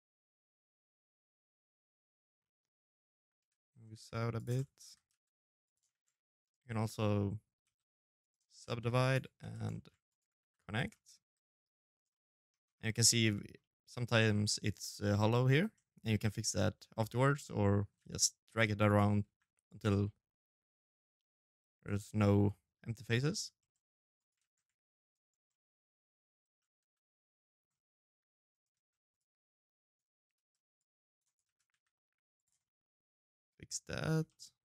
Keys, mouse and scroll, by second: 0.1-0.6 scroll up 4, 0.4 right click, 1.2 middle click, 2.2 l, 2.7 g, 3.3 middle click, 3.6 g, 4.7 shift+z, 5.1 2, 5.2 right click, 5.5 middle click, 6.4-9.6 typing, 7.8 right click, 8.5 middle click, 8.8 shift+right click, 9.7 middle click, 10.7 right click, 10.9 middle click, 11.4-12.3 scroll up 7, 11.7 middle click, 16.7 g, 18.0 g, 18.6 middle click, 22.5 scroll down 1, 22.9 right click, 23.2 shift+z, 23.8 shift+right click, 24.3 middle click, 25.2 shift+z, 25.6 f, 25.8 middle click, 26.5 middle click, 26.8 g, 27.5 shift+z, 27.8 right click, 29.1 right click, 29.1 c, 30.2 shift+z, 30.5 g, 31.4 middle click, 33.6 shift+middle click, 34.0 shift+middle click, 34.4 g.